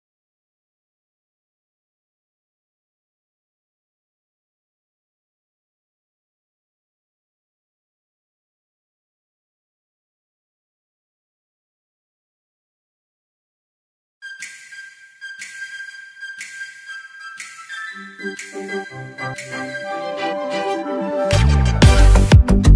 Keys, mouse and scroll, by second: 2.0-4.9 drag, 4.9 ctrl+z, 6.8 click, 8.5 x, 9.4 click, 17.5-17.8 alt+scroll down 1, 18.6-18.9 alt+scroll up 1, 19.0 ctrl+s, 22.3 ctrl+s, 22.5 ctrl+click.